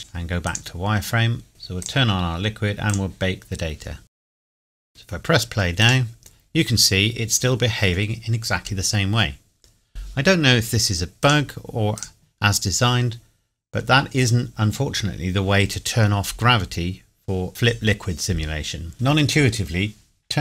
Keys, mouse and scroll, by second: 0.0 z, 0.4 click, 1.8 click, 5.8 click, 11.2 click, 13.3 scroll down 1.